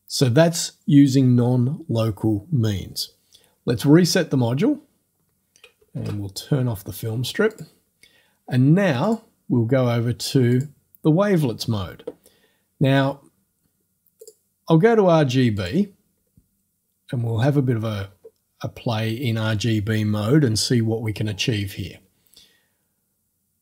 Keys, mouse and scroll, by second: 6.0 ctrl+f, 7.5 click, 9.1 click, 10.5 click, 14.2 click, 15.6 click, 16.5-18.1 scroll up 1, 18.1-19.6 scroll up 1, 19.6 click.